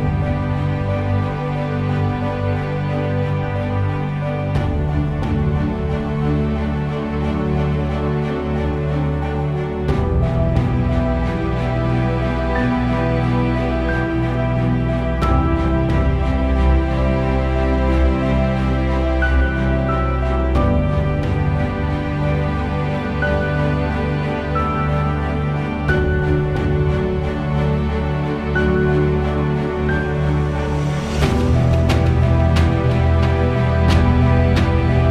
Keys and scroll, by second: 6.6 4, 6.9 Return, 26.9 8, 27.2 Return.